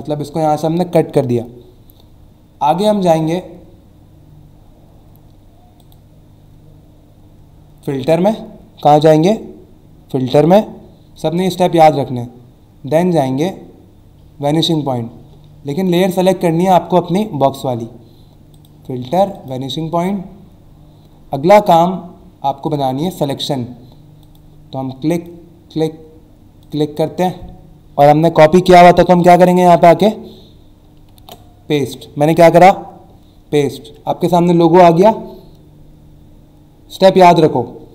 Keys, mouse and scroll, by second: 5.8 click, 15.7 click, 16.2 click, 18.5 click, 19.3 click, 22.6 click, 24.2 click, 25.1 click, 26.6 click, 31.2 ctrl+v.